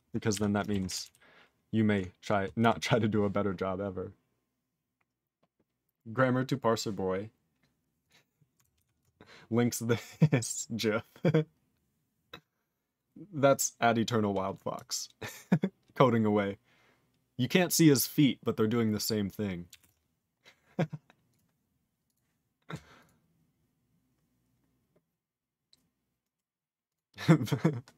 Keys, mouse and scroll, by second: 2.6 q, 19.7 q, 23.0 click, 23.0 click, 26.3 right click, 26.8 click, 26.9 click.